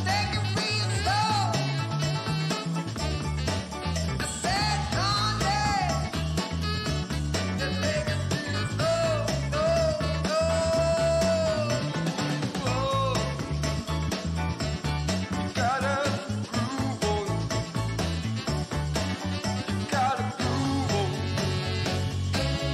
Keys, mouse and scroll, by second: 0.0 click, 1.5-3.5 drag, 4.5-5.1 scroll up 1, 5.1 middle click, 5.1 scroll down 1, 7.3 click, 8.7-9.8 drag, 12.4-14.1 drag, 15.2 right click, 17.6 click, 19.0 ctrl+z, 19.2 right click, 21.1-22.7 drag.